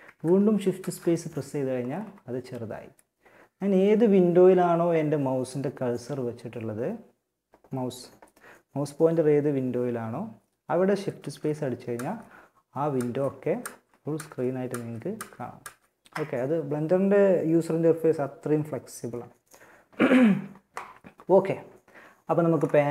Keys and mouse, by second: 0.0 shift+space, 10.4 shift+space, 11.2 shift+space, 12.8 shift+space, 14.0 shift+space, 14.8 shift+space.